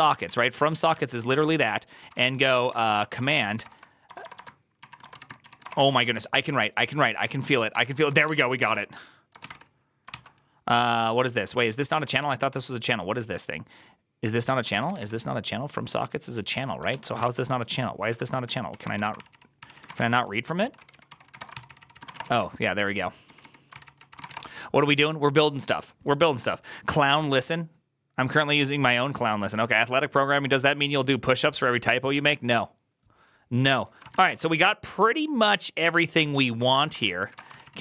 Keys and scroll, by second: 0.0-5.6 typing, 0.8 ctrl+c, 7.6-9.8 typing, 10.0 ctrl+c, 11.1-12.4 typing, 14.5-15.2 typing, 16.8 ctrl+o, 17.1 ctrl+c, 17.7-24.1 typing, 23.6 ctrl+c, 24.1 ctrl+:, 24.2 Return, 33.8-37.8 typing.